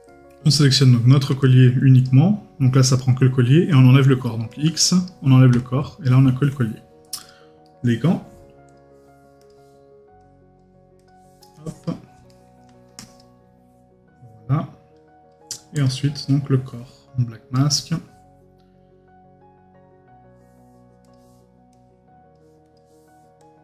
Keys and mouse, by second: 0.1 right click, 7.6 right click, 12.3 right click, 16.2 right click.